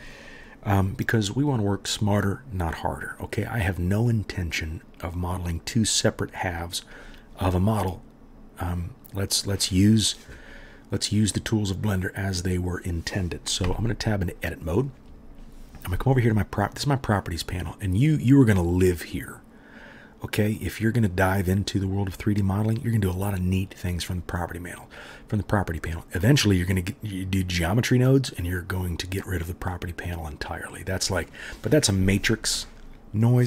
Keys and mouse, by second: 13.7 Tab.